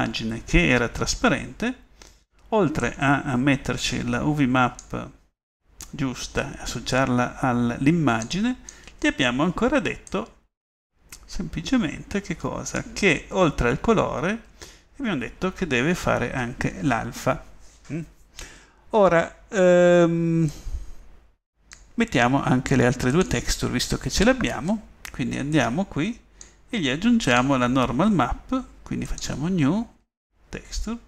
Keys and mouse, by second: 8.3 middle click, 14.2-16.8 middle drag, 17.4 middle click, 29.1 middle click.